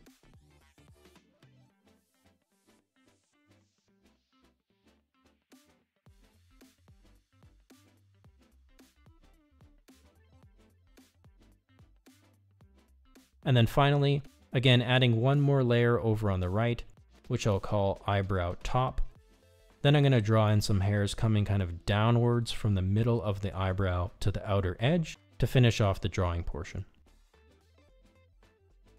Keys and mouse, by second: 1.0 click, 2.2 click, 3.2 ctrl+z, 3.9 click, 4.7 click, 6.3 click, 7.7 click, 8.9 click, 9.9 click, 10.8 click, 12.1 click, 13.2 click, 18.6-21.4 drag, 19.1 BackSpace, 23.1 f, 25.4 ctrl+z, 25.6 click, 26.4 click, 27.4 click, 28.2 click.